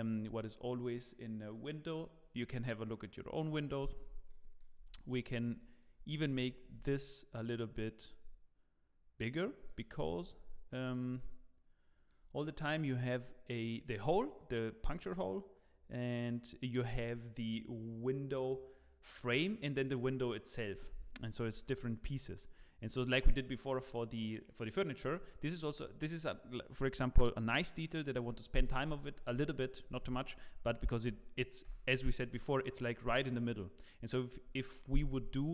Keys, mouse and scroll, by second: 3.4-3.9 scroll down 2, 3.8 scroll up 2, 4.2 middle click, 4.7 Tab, 4.9 scroll down 1, 5.5 middle click, 6.2 s, 9.9 Tab, 10.0-10.4 scroll down 8, 10.8 click, 10.8 scroll down 1, 11.1 middle click, 21.1-21.4 scroll up 5, 21.6 middle click, 21.6 scroll up 2, 22.2 shift+middle click, 25.2 scroll down 4, 31.6 KP_0.